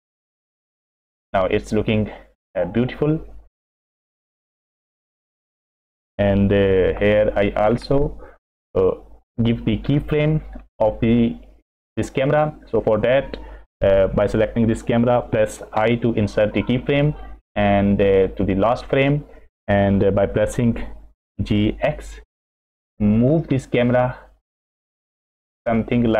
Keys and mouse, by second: 4.4 middle click, 5.5 middle click, 7.0 KP_0, 16.1 i, 18.2 click, 21.3 g.